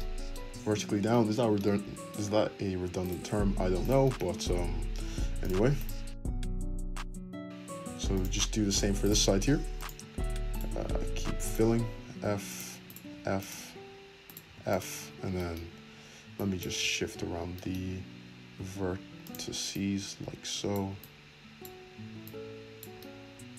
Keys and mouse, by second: 0.4 `, 4.3 right click, 4.4 shift+middle click, 5.2-7.1 shift+middle drag, 6.4 f, 7.2-9.0 middle drag, 7.8 f, 9.3-10.5 middle drag, 9.3 f, 10.5 click, 10.5 middle click, 11.4 click, 11.5-12.8 middle drag, 12.2 f, 12.8 click, 12.9-14.2 middle drag, 13.1 f, 14.2 click, 14.4-16.3 middle drag, 14.4 f, 14.9 `, 16.3 click, 16.6-19.7 ctrl+middle drag, 18.5 g, 19.7-21.5 drag, 21.5-23.1 middle drag, 21.5-23.1 right drag, 23.1-23.5 drag.